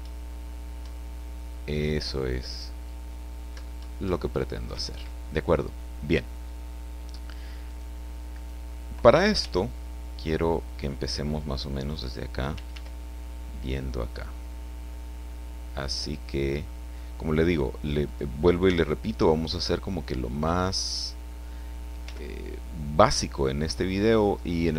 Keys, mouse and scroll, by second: 4.7 Escape, 7.7 right click, 8.3 right click, 8.6 click, 9.4 g, 11.8 click, 12.5 r, 18.0 click, 18.6 r, 20.9 click, 22.0 g, 23.3 click.